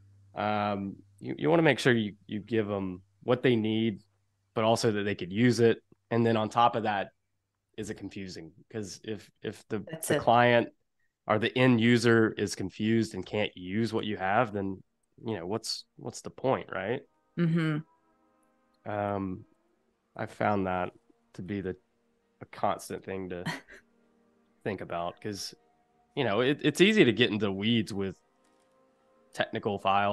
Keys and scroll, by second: 1.8 v, 13.2 a, 19.5 a, 22.1 space, 29.2 space.